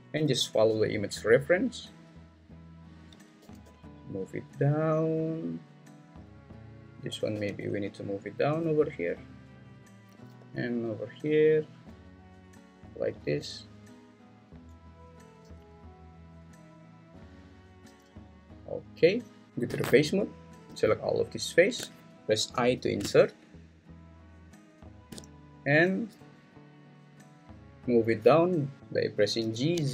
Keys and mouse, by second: 0.1 y, 1.8 click, 3.4 g, 3.6 y, 7.3 g, 7.6 y, 10.4 g, 14.8 click, 15.5 g, 16.8 click, 17.6 click, 17.9 g, 19.7 3, 22.5 i, 24.9 shift+click, 29.4 g, 29.7 z.